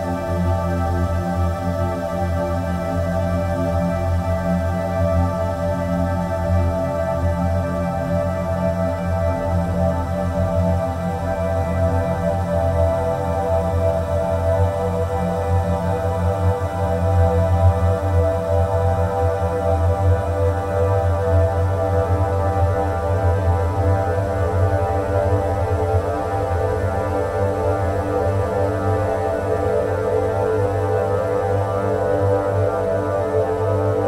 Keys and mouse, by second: 1.9 click, 2.5-3.5 drag, 4.7-5.6 drag, 10.7 click, 11.4 click, 12.6 click, 14.0-22.6 drag, 24.3 click, 28.2-33.1 drag.